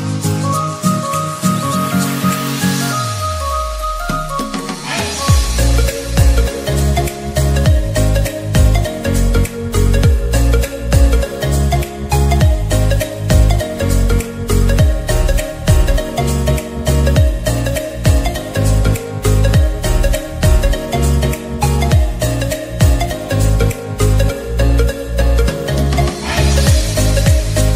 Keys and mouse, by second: 14.6 click, 15.6 ctrl+z, 16.7-21.7 drag, 22.7 Up, 23.7 Left, 24.0 Down, 26.0 click.